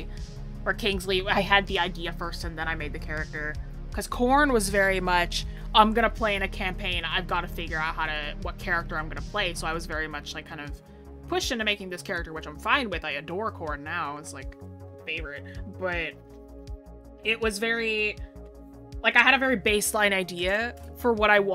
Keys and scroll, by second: 3.3 scroll down 1, 6.1 scroll up 1, 11.5-13.5 scroll down 1.